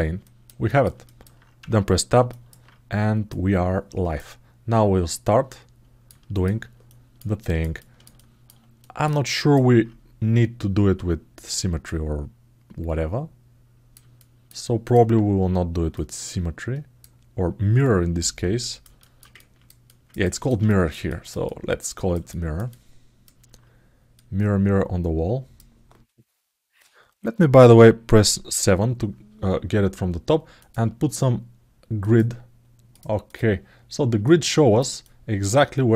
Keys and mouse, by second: 0.0 middle click, 0.4 alt+middle click, 0.8 middle click, 1.3 Tab, 2.0 middle click, 3.0 click, 5.0 click, 6.6 alt+click, 7.1 alt+middle click, 7.5 alt+middle click, 7.9 alt+shift+middle click, 8.6 alt+middle click, 9.1 ctrl+alt+middle click, 11.7-13.7 drag, 13.9 alt+shift+middle click, 14.4 alt+middle click, 15.7-16.7 drag, 17.6-18.6 drag, 18.7 alt+shift+middle click, 19.1 ctrl+alt+middle click, 19.6 ctrl+alt+middle click, 20.0 ctrl+alt+middle click, 20.4 alt+shift+middle click, 20.8 ctrl+alt+middle click, 21.2 alt+middle click, 22.0 alt+shift+middle click, 22.4 alt+middle click, 24.0-25.3 drag, 28.1 KP_7, 30.3-33.4 drag, 34.0 ctrl+alt+middle click, 34.8 alt+shift+middle click.